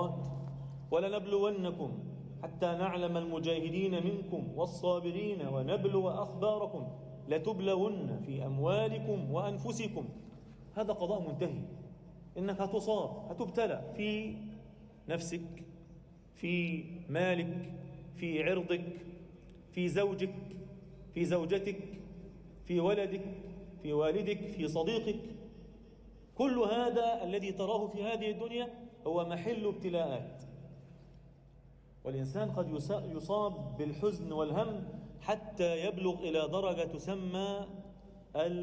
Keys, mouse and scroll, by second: 4.0 click, 6.8 shift+s, 8.5 e, 12.5 alt+e, 14.9-16.9 drag, 17.7-20.1 drag, 21.5-23.3 drag, 24.8 click, 25.3-25.8 scroll down 1, 25.8 scroll down 1, 25.9-26.3 scroll up 1, 26.3 x, 27.4 click, 27.7 scroll down 1, 30.4 z, 30.9 scroll down 1, 31.2 alt+shift+middle click, 31.7-32.6 scroll down 1, 32.6 e, 34.3 a, 35.3 ctrl+r, 35.8 click, 36.5 click, 37.6 x, 38.0 a.